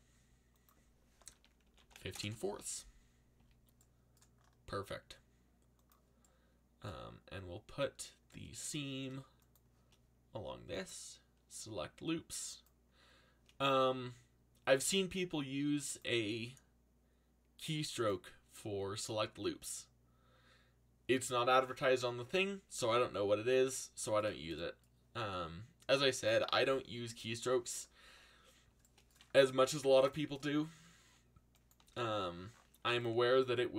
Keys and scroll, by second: 0.8-3.3 typing, 29.6 z, 31.8 c.